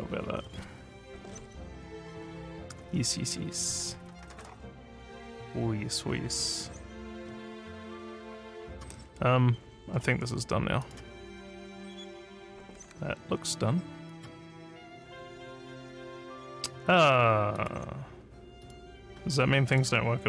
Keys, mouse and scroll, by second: 0.3 scroll up 2, 1.2 scroll down 2, 2.0 scroll down 1, 2.8 scroll up 1, 3.6 scroll up 2, 4.3 scroll up 1, 5.9-6.3 scroll up 3, 7.1 scroll up 1, 10.7 click, 14.0 click, 16.4 click, 17.5 click, 18.6 click, 19.6 click.